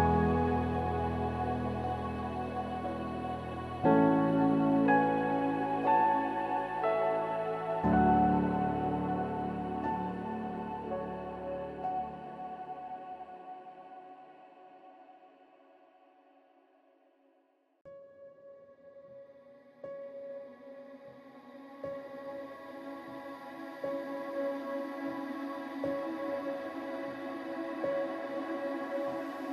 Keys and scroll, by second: 4.3 ctrl+=, 13.9 ctrl+0.